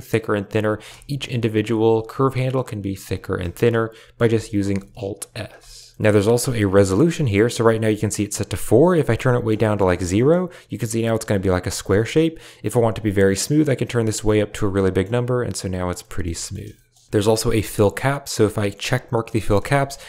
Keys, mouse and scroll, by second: 0.8 Tab, 1.4 click, 1.8 alt+s, 3.1 Tab, 4.1 Tab, 4.6 alt+s, 7.9 shift+click, 9.1 middle click, 9.6 shift+middle click, 9.6 shift+click, 9.8 click, 10.1 shift+click, 11.7 shift+click, 12.5-14.3 drag, 14.7 middle click, 16.0 middle click, 16.3 shift+middle click, 16.7 middle click, 16.9 Tab, 18.7 click, 19.3 middle drag, 19.5 a, 19.6-19.9 middle drag.